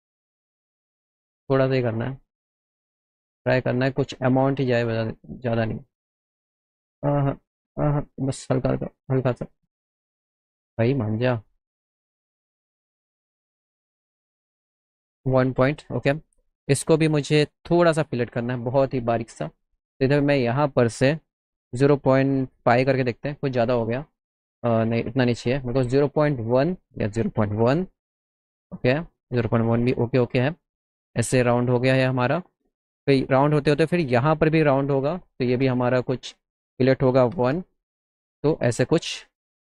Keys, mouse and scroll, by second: 2.4 click, 13.4-14.9 drag, 15.8 middle click, 16.3 click, 16.9 middle click, 17.6 middle click, 20.3 click, 22.7 KP_Enter, 23.9 ctrl+z, 24.8 middle click, 25.1 ctrl+z, 26.4 click, 29.1 middle click, 29.9 scroll up 1, 30.3 middle click, 31.8 middle click, 32.3 middle click, 34.3 click, 36.7 click.